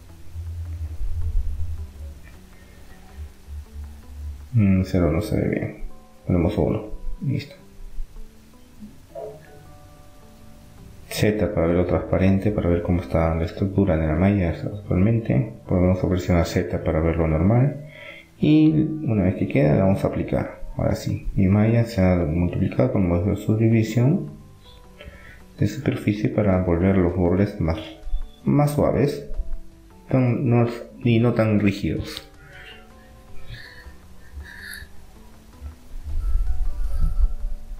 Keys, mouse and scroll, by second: 3.8 click, 4.5-6.5 middle drag, 6.5 click, 7.3 middle click, 8.8 middle click, 10.2 z, 10.8-13.0 middle drag, 14.1 middle click, 14.5 z, 14.8-16.5 middle drag, 18.8-20.5 drag, 20.5 Tab, 20.5-22.3 middle drag, 22.5-25.5 middle drag, 27.3 middle click, 29.0-32.0 middle drag, 34.9 Tab, 35.3-36.5 middle drag, 36.5 click.